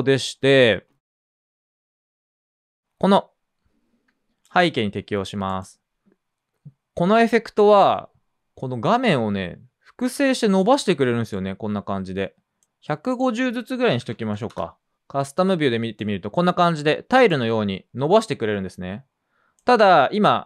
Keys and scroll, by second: 0.0-0.2 typing, 3.6-4.4 typing, 13.6-14.9 typing.